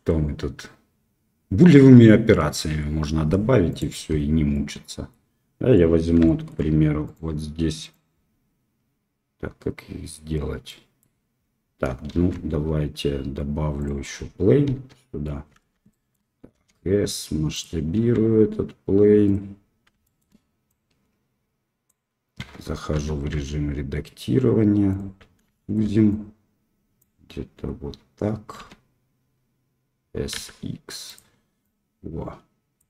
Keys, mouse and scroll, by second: 3.7 click, 4.5-5.1 middle drag, 5.7 middle click, 6.2 shift+middle drag, 7.0 click, 7.8 click, 10.6-11.0 middle drag, 12.1 shift+a, 14.6 KP_7, 15.9 shift+drag, 16.5 s, 17.9 s, 20.0 shift+middle drag, 20.6-21.8 drag, 22.3 Tab, 22.9 s, 25.5 shift+middle click, 26.1 click, 28.5 s, 31.6-32.8 drag.